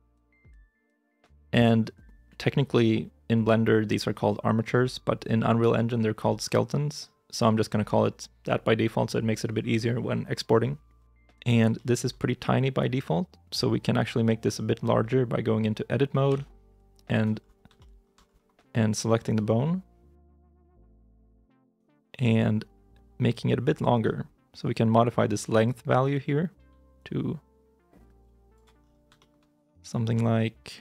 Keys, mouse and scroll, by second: 11.7 shift+middle click, 12.0 scroll up 1, 16.1 Tab, 17.3 scroll up 1, 17.6 shift+middle click, 18.0 shift+scroll down 1, 18.1 scroll up 1, 19.1 right click, 20.4 n.